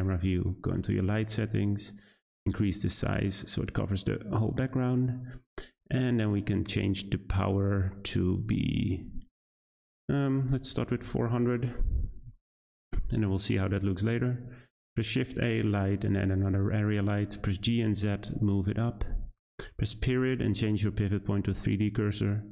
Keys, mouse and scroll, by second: 0.6 click, 2.1-6.3 drag, 6.8-10.0 drag, 11.1 0, 12.6-14.2 scroll up 3, 14.2-14.7 scroll down 1, 14.7 shift+a, 16.4-17.3 scroll down 2, 17.3 g, 20.0 ..